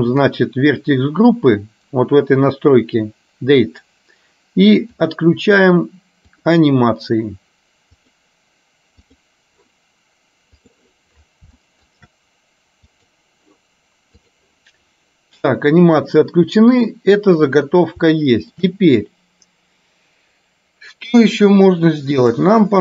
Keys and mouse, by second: 0.2 click, 5.0 click, 8.1 click, 10.6 click, 11.7 shift+middle click, 13.1 click, 18.2 shift+middle click, 22.4 click.